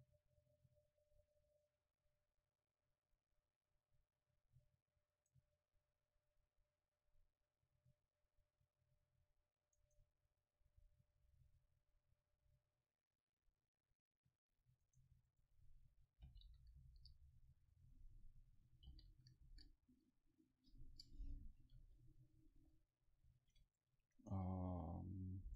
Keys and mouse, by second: 1.5-2.7 drag, 7.0-8.5 drag, 10.7-12.6 drag, 15.5-20.9 drag.